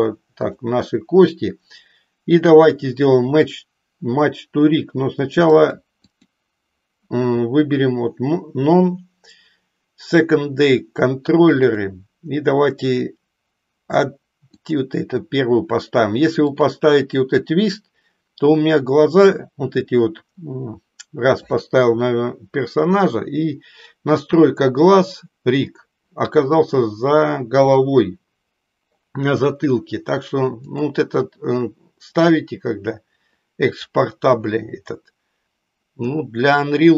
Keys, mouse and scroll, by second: 0.4 click, 5.6 click, 6.2-10.4 drag, 11.6-14.8 drag, 16.4-18.6 drag, 30.7-36.9 drag.